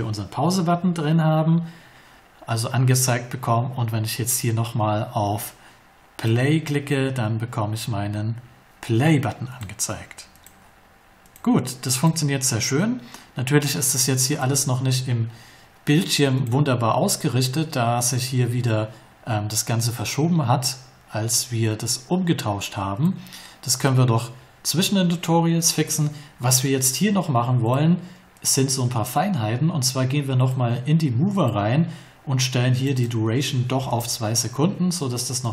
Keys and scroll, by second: 33.7 2, 33.9 Return.